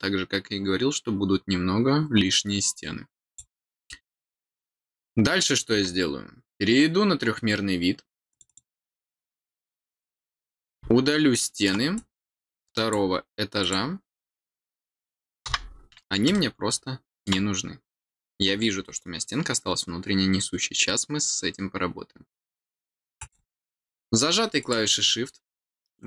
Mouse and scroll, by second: 3.2 click, 8.2 click, 8.4 click, 9.6 click, 10.4-11.6 middle drag, 11.9-12.9 drag, 13.5 click, 16.3 middle click, 18.4-18.8 scroll down 2, 23.1 click, 24.5 click.